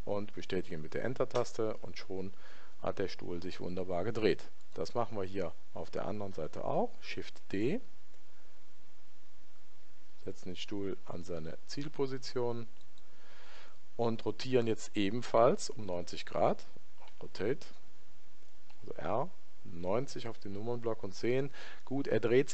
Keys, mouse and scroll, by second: 7.3 shift+d, 17.1 r.